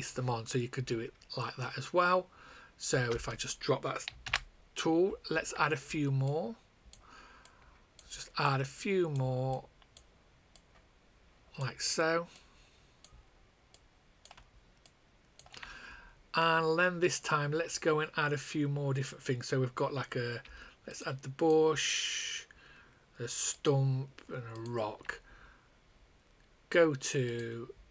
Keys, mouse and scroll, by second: 3.0 space, 4.2 ctrl+z, 6.2 shift+click, 7.1 shift+click, 7.4 shift+click, 8.1 shift+click, 10.9 shift+click, 11.7 shift+click, 20.8 shift+click, 27.2 click.